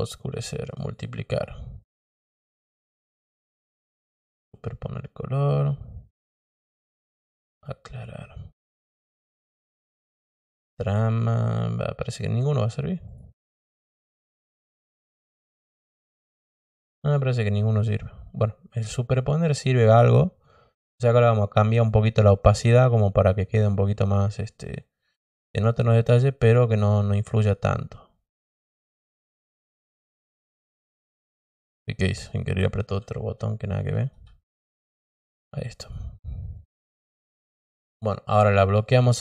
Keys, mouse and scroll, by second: 0.7 click, 2.7 click, 4.1 click, 5.3 click, 6.6 click, 8.5 click, 9.9 click, 11.1 click, 11.9 click, 13.0 click, 13.9 click, 15.7 click, 16.7 click, 21.4 click, 22.4 click, 22.9 click, 23.6 click, 24.6 click, 25.7 click, 26.5 click, 27.2 click, 29.2 click, 33.2 ctrl+z, 33.8 ctrl+z, 35.7 click, 36.5 click, 39.0 click.